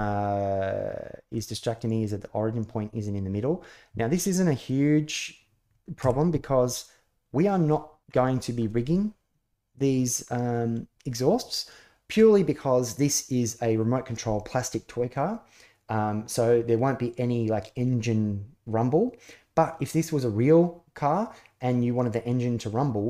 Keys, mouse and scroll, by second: 1.1-1.6 middle drag, 5.8 KP_1, 7.9-8.4 middle drag.